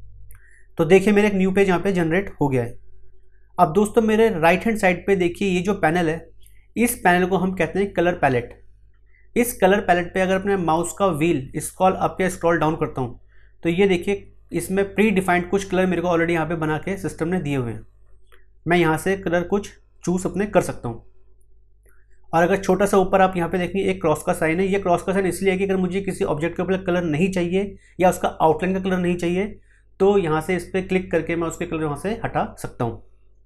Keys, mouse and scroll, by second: 11.7-12.3 scroll up 1, 12.3-15.3 scroll down 1, 17.5-20.6 scroll up 1.